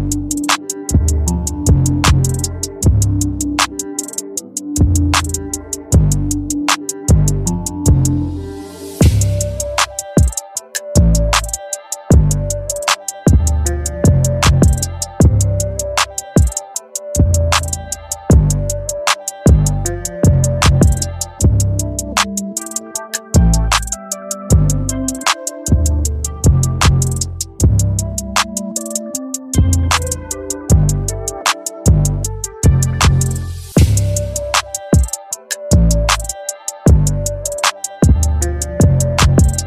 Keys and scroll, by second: 6.9 ctrl+=, 10.8 ], 11.7 [, 13.4 ], 19.5 ], 25.3 ctrl+alt+z, 35.3 ], 39.1 [.